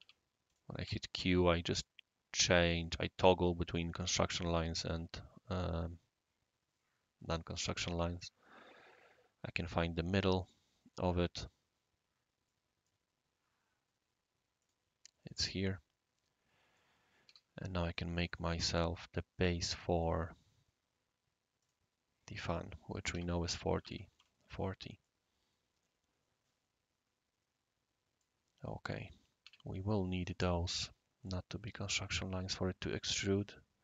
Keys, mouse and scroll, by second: 0.0 Escape, 0.5 click, 0.8 q, 4.4-5.3 middle drag, 8.1 click, 10.4 click, 12.5 right click, 14.6 click, 15.3-16.8 right drag, 17.3 r, 18.5 click, 21.6 click, 22.4 click, 23.1-23.8 typing, 23.4 Return, 24.1 Return, 25.0-29.4 right drag, 29.4 Escape, 30.2-30.9 drag, 31.2 click, 31.6-33.1 typing.